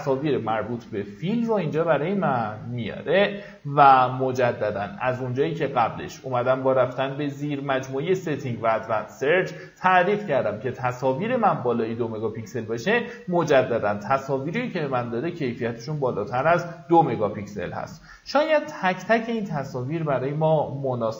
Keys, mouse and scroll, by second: 12.7-13.5 scroll down 1, 19.0 middle click, 19.9-20.6 scroll down 1.